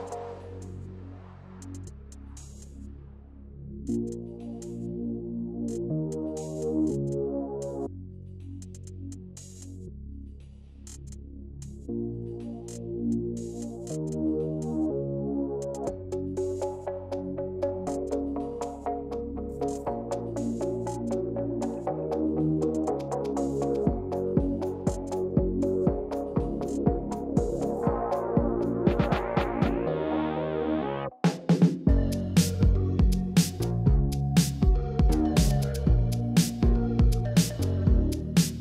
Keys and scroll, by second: 1.9 Down, 2.0 Down, 2.0 Down, 2.1 Down, 17.0 ctrl+z, 17.3 ctrl+z, 17.5 ctrl+z, 19.0 Left, 20.7 Right, 24.0 8, 25.5 8, 33.7 shift+Up, 36.2 shift+Up.